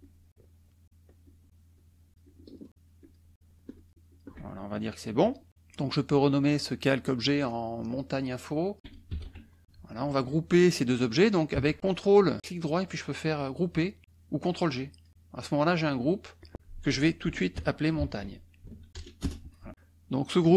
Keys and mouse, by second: 0.0-2.7 shift+drag, 3.0 shift+click, 3.7 shift+click, 4.4 shift+middle click, 5.1 shift+KP_Subtract, 7.8 click, 8.5-9.7 typing, 8.6 click, 11.8 ctrl+click, 12.5 right click, 14.5 click, 16.0 click, 16.6-19.0 typing, 20.4 click.